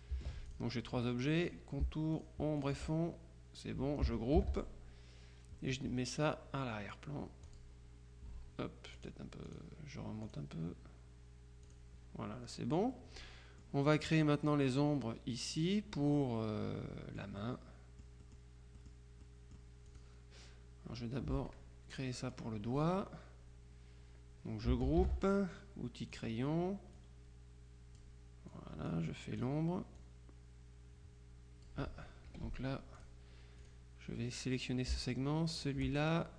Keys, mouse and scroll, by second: 0.5 ctrl+click, 1.5 click, 2.2-3.2 shift+drag, 4.5 ctrl+g, 7.6 click, 9.1-10.1 drag, 10.3 click, 11.7 click, 13.0-14.2 drag, 16.2-17.7 drag, 18.3 click, 19.3 click, 19.9 click, 25.1 ctrl+g, 26.2 click, 27.1-28.5 drag, 29.2 click, 30.1-32.2 drag, 32.4 F2, 33.0 click, 33.7 click, 35.7 shift+click.